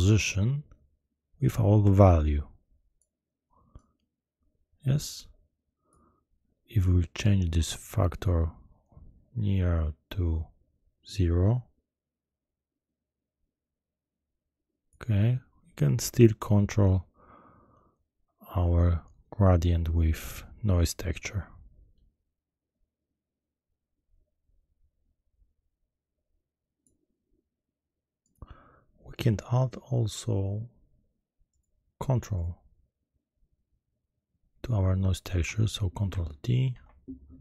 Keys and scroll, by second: 36.7 ctrl+t.